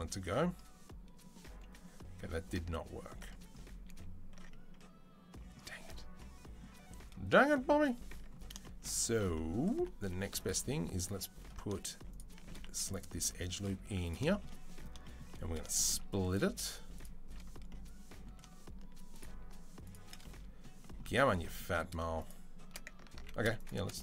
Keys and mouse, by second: 3.7 ctrl+z, 7.7 Tab, 8.0 Tab, 9.6 2, 12.5 z, 12.8-21.8 middle drag, 13.6 z, 22.5 middle click, 22.7 ctrl+click, 23.0 ctrl+z, 23.0 middle click, 23.7-24.0 middle drag.